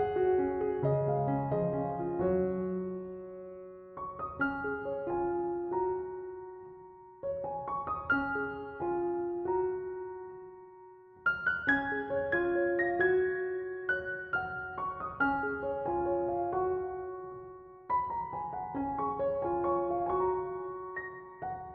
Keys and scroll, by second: 2.3 space, 3.6 space, 20.9 space.